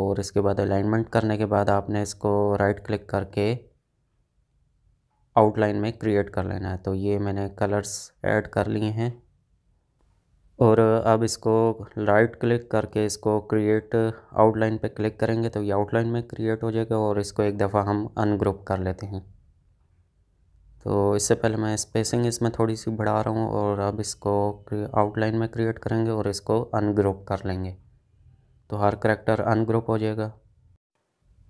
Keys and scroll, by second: 1.2 space, 17.3 ctrl+z, 31.1 space.